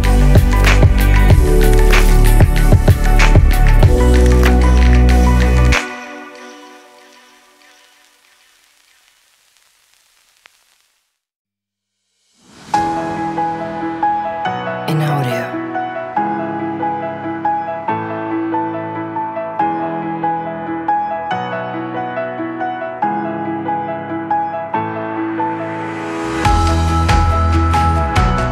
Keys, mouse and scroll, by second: 1.4 g, 1.4 click, 1.8 z, 2.1 g, 4.0 drag, 4.4-4.9 middle drag, 5.8-7.6 drag, 11.4 click, 12.8-14.2 drag, 15.0 click, 15.3 click, 15.6 click, 17.9 click, 19.6 click, 19.7 click, 20.5 click, 21.4 click, 21.6-22.2 drag, 24.4 shift+click, 25.6 drag, 26.3 click, 26.7 x, 27.7 middle click, 28.3 middle click.